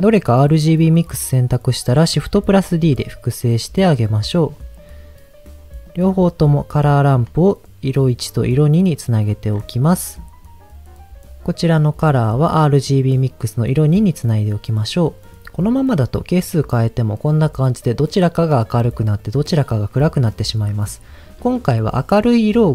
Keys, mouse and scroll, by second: 0.7 click, 2.3 shift+d, 4.8 click, 5.8-7.2 drag, 8.1 click, 9.2 click, 9.5-10.3 scroll up 3, 9.9 middle click, 11.6-13.3 drag, 14.8 middle click, 15.3 scroll down 2, 15.6-20.7 drag.